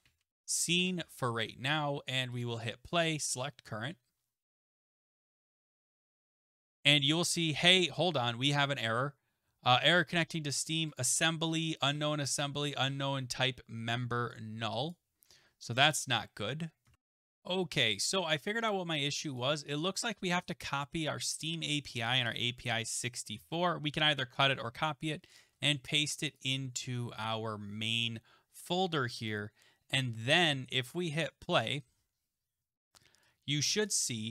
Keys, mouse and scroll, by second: 0.0-0.9 typing, 2.4 click, 3.3 click, 6.6 click, 11.5 click, 14.9 click, 16.9 alt+Tab, 17.1 click, 19.4 click, 19.5 click, 20.4 click, 20.7 shift+click, 23.3 ctrl+x, 24.5 click, 25.4 click, 25.5 ctrl+v, 26.4 click, 29.3 click, 31.2 click, 33.9 click.